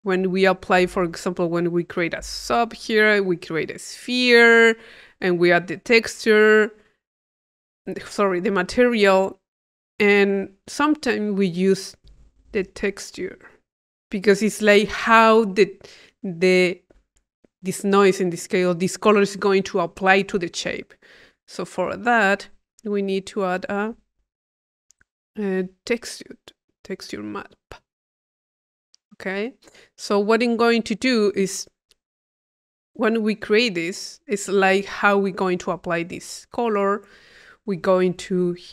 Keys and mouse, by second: 0.2 click, 0.8 Tab, 2.0 click, 4.1 click, 7.3 click, 8.1 click, 9.7 click, 11.5-12.9 drag, 12.1 Tab, 13.5 click, 14.0-16.6 drag, 17.6-18.8 drag, 20.7 right click, 21.4 Delete, 21.6 click, 23.1 click, 23.6 click, 26.8 click, 27.7 click, 28.2 click, 28.7 click, 29.4 click, 30.6 click, 31.2 click, 32.7-33.7 drag, 33.9 click, 38.4 click.